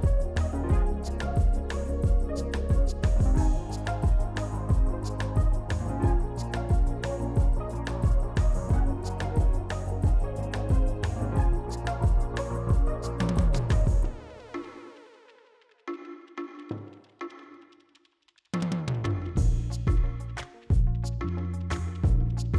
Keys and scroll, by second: 12.5 s, 22.1 s.